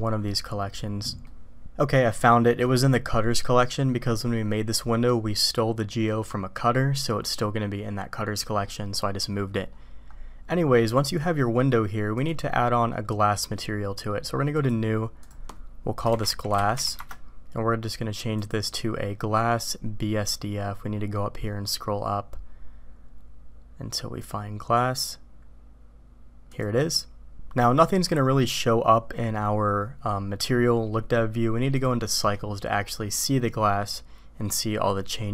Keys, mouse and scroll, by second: 1.4 click, 1.5 middle click, 12.1 click, 14.6 click, 15.2-17.8 drag, 16.7 s, 18.5-26.7 drag.